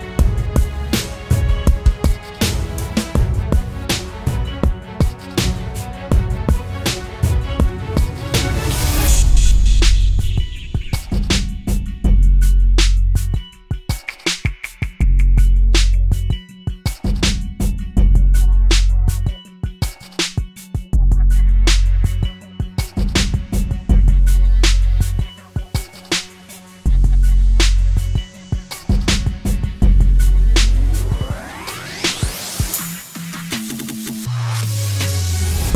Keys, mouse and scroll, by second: 1.1 double click, 11.9-12.9 typing, 18.4-18.8 typing, 22.5 typing, 22.9 ctrl+-, 23.1 ctrl+-, 27.1-27.6 scroll up 1, 28.1 double click.